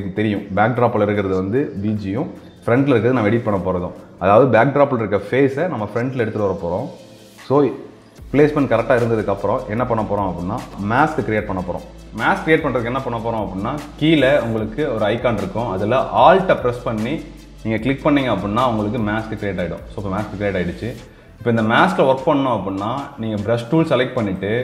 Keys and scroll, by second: 8.0 ctrl+space.